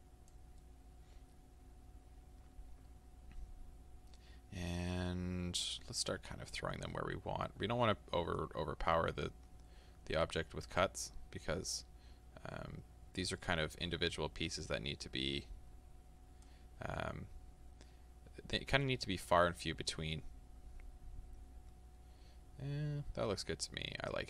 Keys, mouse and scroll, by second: 0.7-8.5 middle drag, 8.5-17.0 drag, 17.0-24.2 middle drag.